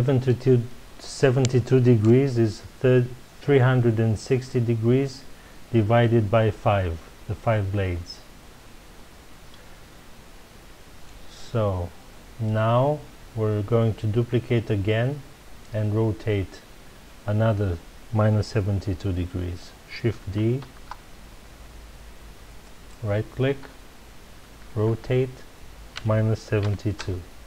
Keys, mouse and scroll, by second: 20.6 shift+d, 22.9 right click, 24.7 r.